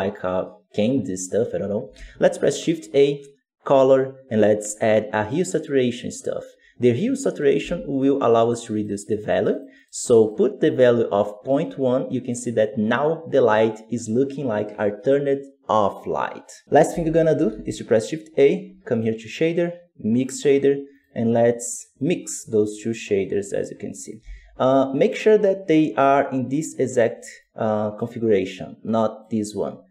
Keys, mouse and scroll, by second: 7.3-11.8 drag, 11.8-20.3 middle drag, 20.3 shift+a, 23.5 click, 23.9 right click, 24.1 g, 27.4-29.9 drag.